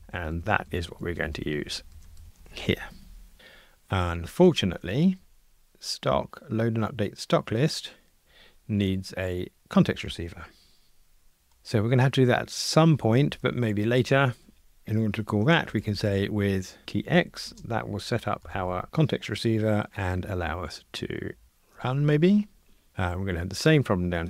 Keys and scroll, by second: 2.2 alt+shift+Right, 7.7 super+b, 13.0 super+[.